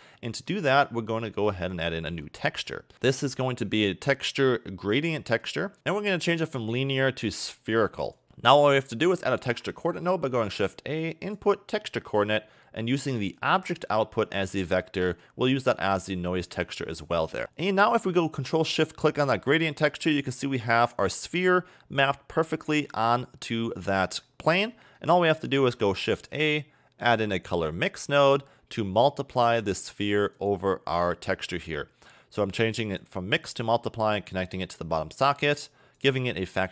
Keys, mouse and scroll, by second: 0.1 middle click, 0.7 scroll up 2, 1.2 middle click, 2.1 a, 2.2 a, 2.9 shift+a, 6.4 click, 8.3 shift+a, 9.3 shift+a, 13.5 click, 15.2 click, 17.4 middle click, 18.7 ctrl+shift+click, 20.1 middle click, 21.5 scroll down 1, 22.6 middle click, 24.7 middle click, 26.0 shift+a, 30.4 click, 33.7-34.4 scroll down 3, 34.4 click, 36.5 click.